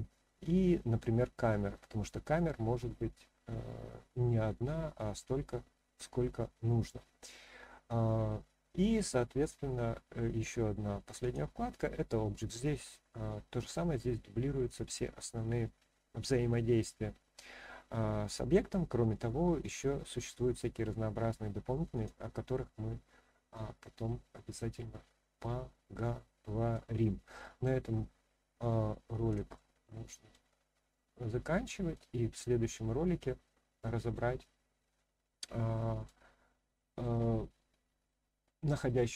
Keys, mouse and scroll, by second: 9.4 click, 11.2 click, 14.3-21.9 drag, 22.7-23.2 scroll down 1, 23.2-23.8 scroll up 1, 23.8-24.3 scroll down 1, 24.3-26.7 middle drag, 29.5-30.3 shift+middle drag, 30.9-31.9 middle drag, 32.2 scroll up 1, 32.9-34.1 middle drag, 34.4-34.9 scroll down 1, 34.9-36.0 middle drag.